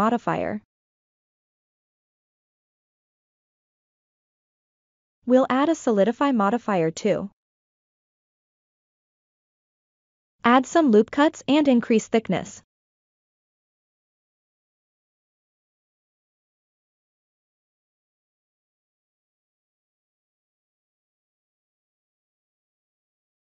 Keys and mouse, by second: 1.3-1.7 ctrl+middle drag, 3.3 middle click, 5.5 click, 7.3-7.8 middle drag, 8.0 Tab, 9.1 ctrl+r, 12.3 middle click, 13.4 ctrl+r, 16.1-17.6 middle drag, 18.6-21.0 shift+drag, 21.6-22.4 middle drag, 22.6-23.0 shift+middle drag.